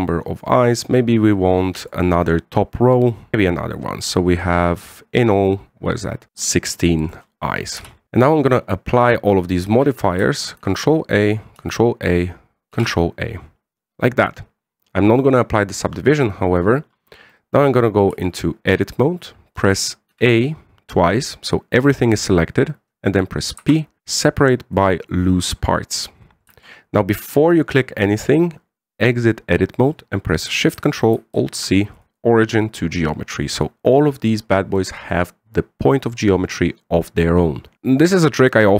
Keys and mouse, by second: 1.0 click, 2.6 drag, 3.6 click, 4.5-6.2 middle drag, 6.4-7.9 middle drag, 8.0 KP_1, 9.8 click, 11.4 ctrl+a, 12.3 ctrl+a, 13.5 ctrl+a, 18.0-18.4 middle drag, 18.9 Tab, 20.3 a, 20.9 a, 24.0 p, 27.2 Tab, 32.1 ctrl+alt+shift+c, 33.2-35.5 middle drag, 37.7 KP_1.